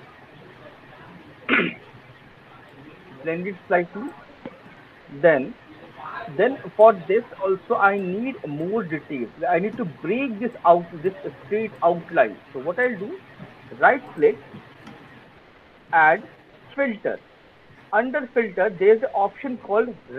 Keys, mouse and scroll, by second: 0.0 alt+click, 3.4 click, 4.1 middle click, 5.6 alt+middle click, 6.0 alt+click, 6.4 alt+middle click, 6.5 alt+click, 7.9 alt+click, 8.4 alt+middle click, 9.4-10.2 scroll, 13.8 click, 16.8 click, 18.0 click, 19.2-19.6 scroll.